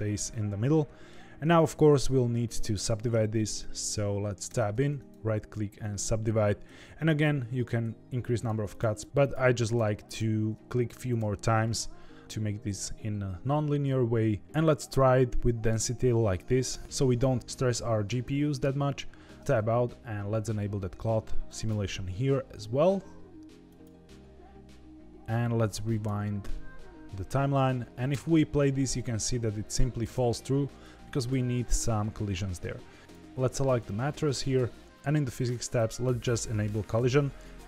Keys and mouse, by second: 4.4 Tab, 5.0-5.9 right drag, 8.3 right click, 8.9 right click, 9.0 ctrl+z, 9.6 right click, 10.9 right click, 14.9 middle click, 16.3 middle click, 19.4 Tab, 21.4 click, 23.8 click, 25.2 click, 28.1 space, 30.0 space, 30.8 click, 36.1 click.